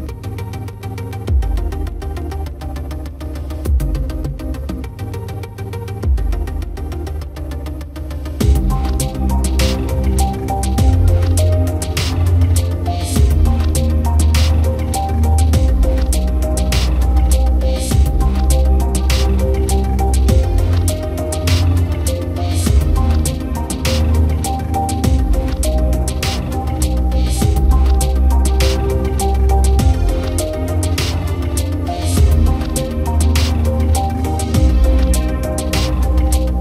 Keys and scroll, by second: 10.1 Return, 16.4 Down.